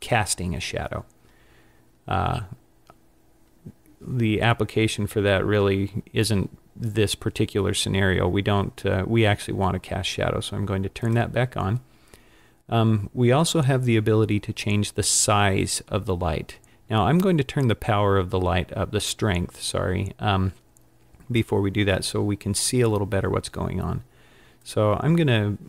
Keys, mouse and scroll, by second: 11.1 click, 24.6 click.